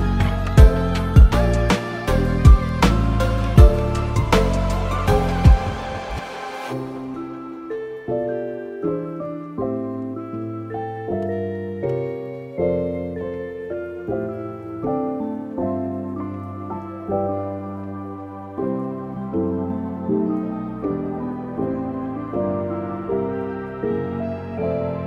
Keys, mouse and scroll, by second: 1.9 click, 2.9 r, 4.4 s, 5.7 g, 7.5 s, 8.5 s, 13.4 middle click, 14.4 Tab, 14.9-15.3 scroll down 2, 15.1 shift+middle click, 15.5 middle click, 16.0 middle click, 16.2 shift+middle click, 16.7 click, 17.2 Tab, 18.3 click, 18.5 Tab, 18.9 click, 19.2 alt+q, 19.7 click, 20.5 click, 21.3 middle click, 21.5 shift+middle click, 22.1 click, 22.5 click, 23.5 middle click, 23.7 alt+q, 24.0 alt+q, 24.4 middle click, 24.6 alt+q.